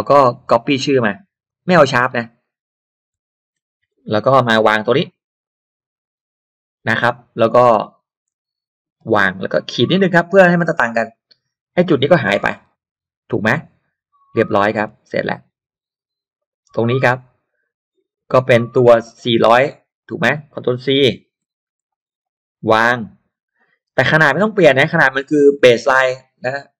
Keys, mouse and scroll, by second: 0.5-2.1 drag, 3.6 ctrl+c, 3.7 ctrl+click, 4.2 click, 4.6 click, 5.4-7.0 drag, 7.4 click, 9.0 ctrl+v, 11.1 click, 12.4 BackSpace, 14.1 middle click, 14.1-14.4 scroll down 1, 14.8 scroll down 2, 15.4 scroll up 2, 16.4 click, 18.0 scroll down 2, 19.0 click, 19.6 click, 21.4 ctrl+c, 21.8 click, 22.2 click, 22.8 click, 24.3 click, 25.4 ctrl+v.